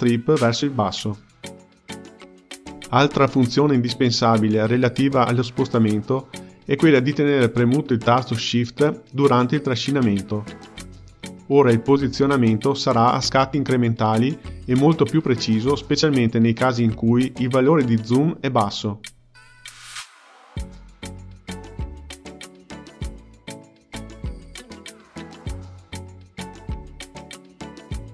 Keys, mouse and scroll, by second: 2.2-10.0 drag, 10.0-10.5 scroll down 1, 11.2-11.6 scroll down 1, 12.0-13.5 scroll down 8, 13.5-20.6 drag, 21.1-25.3 drag, 27.4-28.1 scroll up 1.